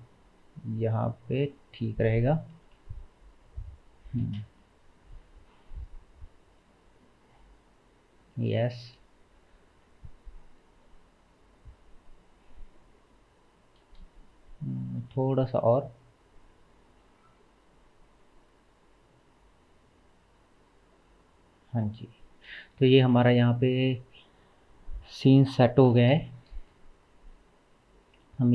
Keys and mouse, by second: 2.1-4.2 middle drag, 2.5 g, 4.2 space, 5.6-17.2 middle drag, 13.9 space, 14.9 g, 17.2-28.5 drag, 22.6 space, 26.6 space.